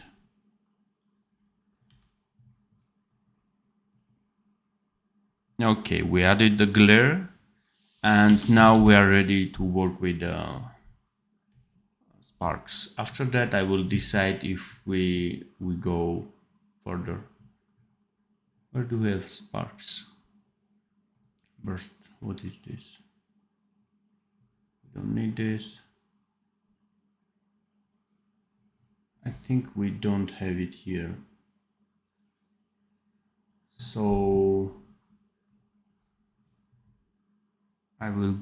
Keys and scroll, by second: 1.7 d, 8.1 d, 8.7 ctrl+s.